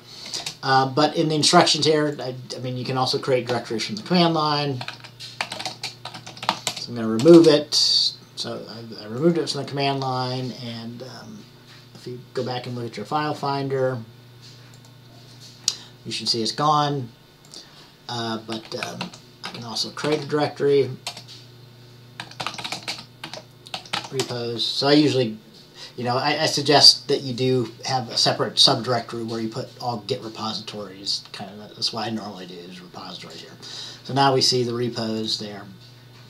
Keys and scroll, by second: 4.7-7.1 typing, 18.7-20.7 typing, 22.1-24.8 typing.